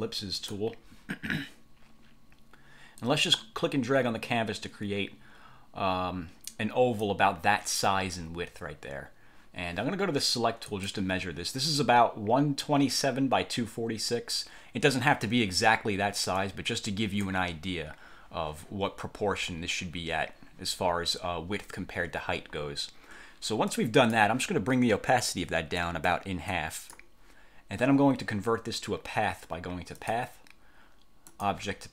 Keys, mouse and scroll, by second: 0.5 click, 3.2-7.4 drag, 10.8 click, 16.5-17.6 drag, 23.8 click, 25.9 click, 26.6 click, 30.1 click, 31.4 click.